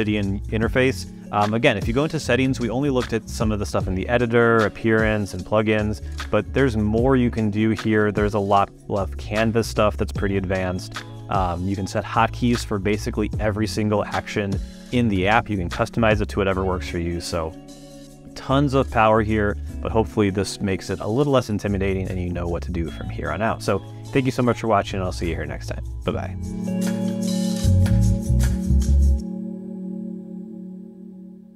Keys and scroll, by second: 1.6 super+,.